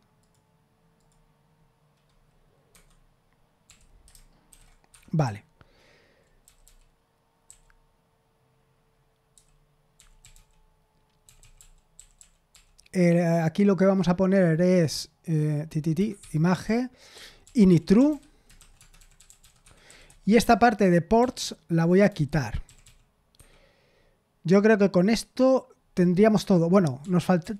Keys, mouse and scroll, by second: 0.2 click, 0.9 click, 2.7 Escape, 3.6 o, 4.4 ctrl+v, 4.9 Escape, 5.0-7.1 typing, 9.3-13.0 typing, 15.9 Escape, 16.3-22.8 typing, 23.3 Escape, 27.0-27.5 typing.